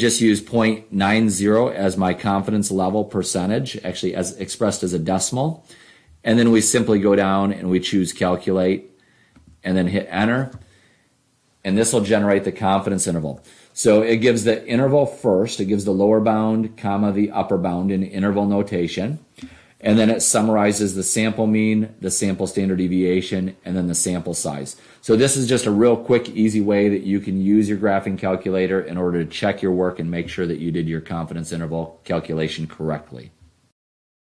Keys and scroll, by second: 0.5 ., 1.5 9, 2.3 0, 6.9 Down, 9.5 Return.